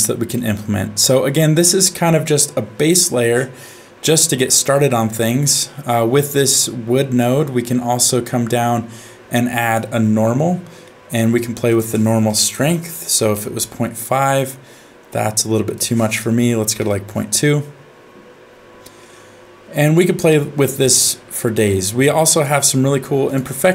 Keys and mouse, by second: 0.3 middle click, 4.0-5.4 middle drag, 6.5 click, 6.7-9.7 drag, 10.8 middle click, 11.7-13.3 drag, 15.8 click, 19.7 middle click, 20.3 shift+middle click, 21.4 middle click, 22.3-23.3 drag.